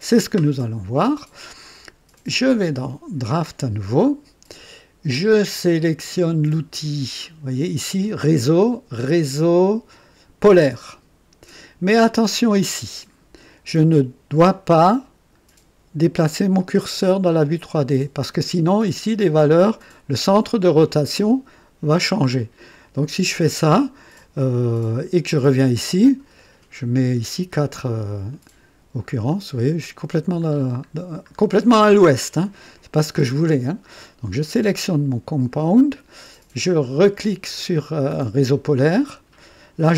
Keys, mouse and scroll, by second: 3.6 click, 7.1 click, 10.8 click, 26.0 scroll down 2, 28.3 click, 29.0-29.9 scroll down 2, 30.4 scroll up 1, 31.2 scroll up 1, 32.5 click, 34.4 click, 35.5 scroll up 1, 39.1 click.